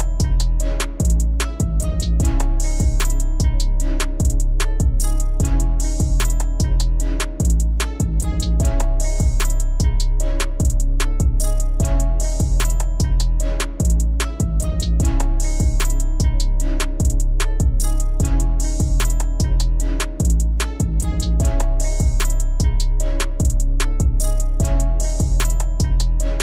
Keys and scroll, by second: 19.4 alt+w.